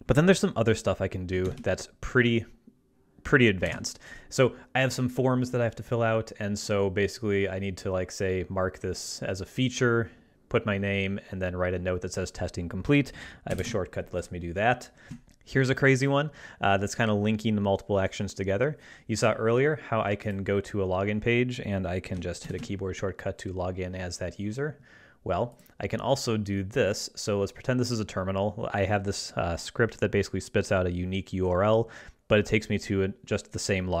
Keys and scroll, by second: 4.7 ctrl+Tab, 13.6 ctrl+alt+super+space, 13.7 ctrl+alt+super+g, 15.1 ctrl+Tab, 22.4 ctrl+alt+super+n, 22.7 ctrl+alt+super+Tab.